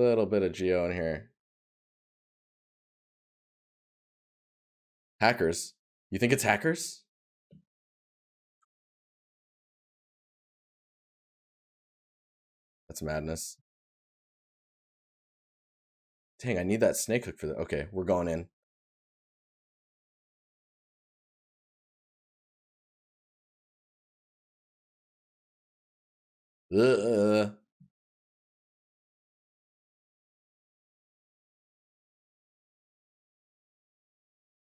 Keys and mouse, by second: 3.0 right click, 6.4 right click, 8.5 right click, 30.0 right click, 33.1 right click.